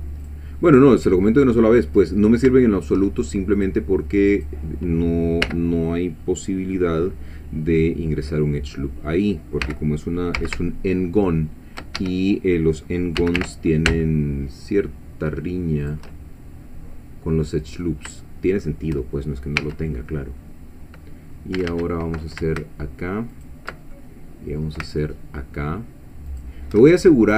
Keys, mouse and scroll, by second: 0.3 click, 0.7-2.0 middle drag, 2.5 shift+middle click, 3.6 click, 4.3 click, 5.5 l, 9.6 g, 10.4 z, 12.0 shift+Escape, 13.2 g, 13.4 y, 15.8 shift+click, 16.1-18.0 shift+drag, 18.2 shift+click, 19.6 1, 20.4 scroll up 2, 21.6 a, 23.3 alt+shift+click, 23.9 alt+shift+middle click, 26.3 alt+shift+click.